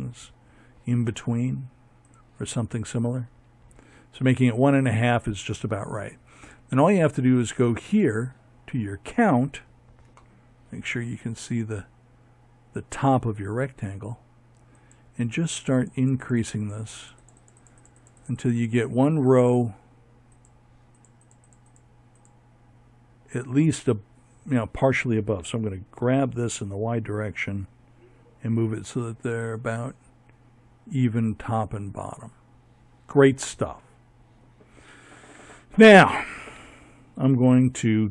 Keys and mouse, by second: 12.8-22.0 drag, 23.8 g, 37.6 shift+d.